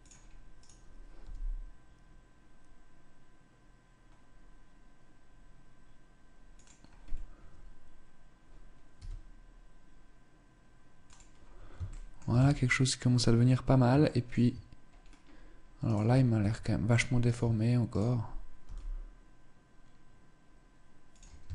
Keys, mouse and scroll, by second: 0.1 right click, 0.7 g, 6.6 scroll down 1, 8.5 s, 11.4 shift+middle click, 11.8 Tab, 13.6 shift+middle click, 14.4-14.7 scroll up 3, 15.4 right click, 15.6 Tab, 15.9 Tab, 16.8 right click, 16.9 Tab, 17.4 right click, 18.1 g, 21.0 shift+middle click.